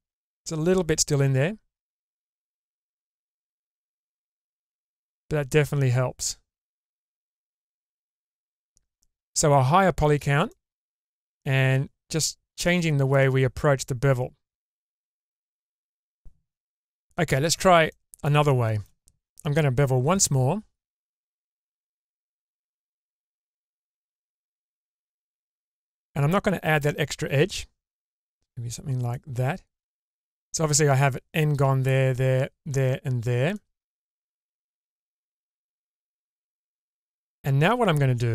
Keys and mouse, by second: 1.9-4.0 middle drag, 5.0-7.6 middle drag, 8.2 Tab, 10.5 middle click, 12.8 shift+middle click, 14.6-16.5 middle drag, 17.9 middle click, 18.5 shift+middle click, 20.2 ctrl+b, 29.9 middle click, 33.6 middle click, 34.1 Tab, 35.2-36.3 middle drag.